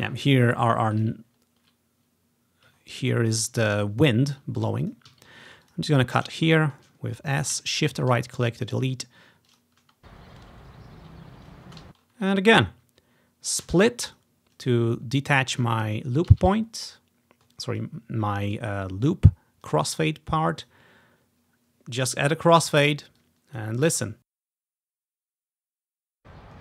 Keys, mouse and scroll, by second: 0.0 space, 1.1-2.3 ctrl+drag, 1.4 scroll down 1, 2.3-2.9 ctrl+scroll down 1, 2.9-3.9 ctrl+scroll up 1, 3.9 ctrl+scroll down 1, 4.4 ctrl+click, 4.6-5.0 ctrl+scroll up 1, 5.2 s, 5.4 ctrl+scroll down 1, 5.8 click, 6.0-7.6 drag, 6.1 scroll down 1, 7.9 right click, 9.6 click, 9.9-11.8 typing, 11.4-12.0 ctrl+scroll up 2, 12.0 scroll down 2, 12.7-13.8 drag, 13.8 s, 14.2 click, 14.7-15.7 drag, 16.4 ctrl+click, 16.9-17.6 ctrl+scroll up 1, 17.9 ctrl+click, 18.0 typing, 19.3-20.1 typing, 19.6-20.8 drag, 23.3-24.6 drag, 24.0-26.3 typing, 25.1-25.8 ctrl+scroll up 2, 25.8 click.